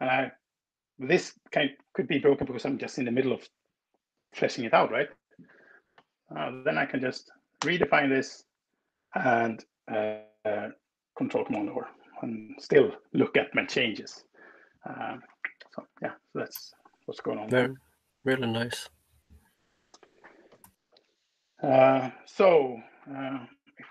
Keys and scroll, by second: 7.2 alt+Return, 11.4 ctrl+super+r, 17.2 super+l, 18.1 Return.